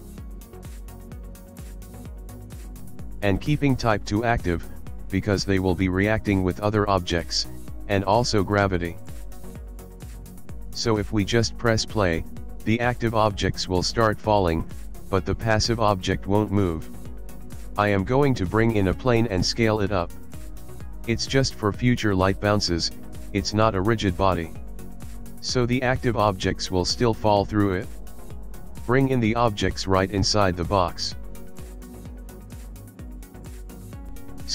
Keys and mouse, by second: 1.2 click, 2.1 click, 2.5 click, 7.0 click, 9.2 click, 10.9 click, 11.8 click, 14.7 click, 16.9 shift+a, 19.3 s, 23.8 click, 24.6 click, 25.1 click, 25.7 click, 26.6 shift+click, 27.6 g, 30.5 g, 32.0 click, 32.6 middle click, 33.9 click, 33.9 s, 34.4 s.